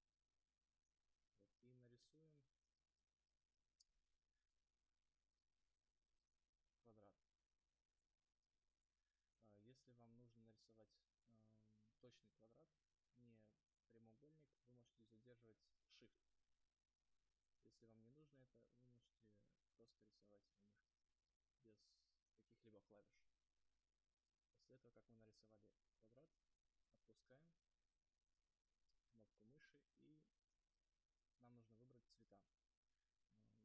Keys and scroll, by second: 2.2 space, 27.9 space.